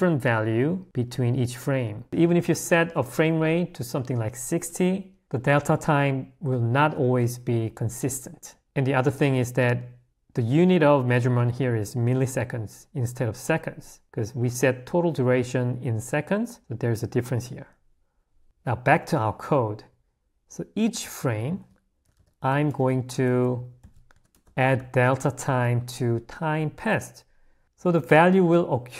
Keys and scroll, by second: 19.2 h, 21.5 i.